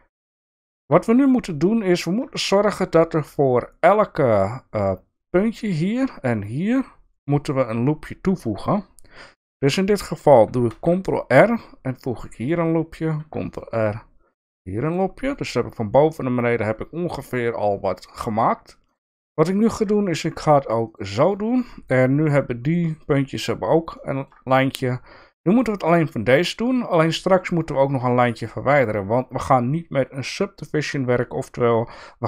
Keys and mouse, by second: 0.4 shift+middle click, 1.2 click, 2.3 shift+middle click, 10.7 ctrl+r, 13.1 ctrl+r, 18.9 click, 19.7 ctrl+r, 23.9 shift+middle click, 28.4 click.